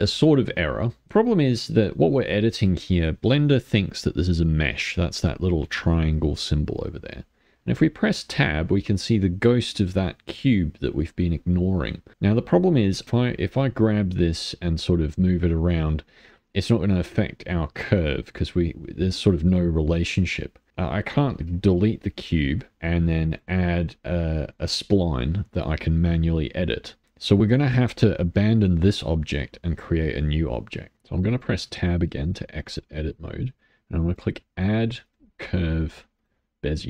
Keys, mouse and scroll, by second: 1.1 click, 3.5 click, 7.2 middle click, 7.7 Tab, 8.3-11.4 middle drag, 11.4-12.1 scroll down 2, 12.1 middle click, 13.0 click, 16.1-19.1 middle drag, 21.3 middle click, 21.4 a, 21.8 Delete, 22.7 click, 23.3-27.9 drag, 27.9-31.3 middle drag, 31.3 click, 31.6 Tab, 32.1 middle click, 32.7 click, 34.0-36.8 drag.